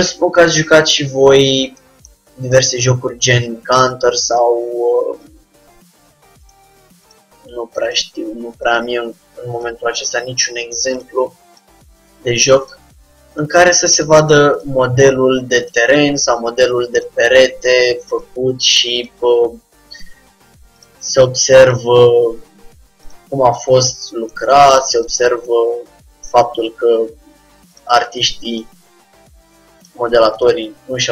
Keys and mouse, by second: 0.5-2.2 drag, 0.7 g, 3.7 g, 5.4-7.0 drag, 5.4 g, 7.2-11.2 drag, 7.3 g, 10.1 g, 11.6-13.2 drag, 11.8 g, 15.0-16.2 drag, 15.0 g, 17.1-18.7 drag, 17.2 g, 19.1-20.8 drag, 21.8-23.4 drag, 22.0 g, 25.1-28.5 drag, 25.3 g, 28.6-30.3 drag, 28.8 g, 30.7-31.1 drag, 30.7 g.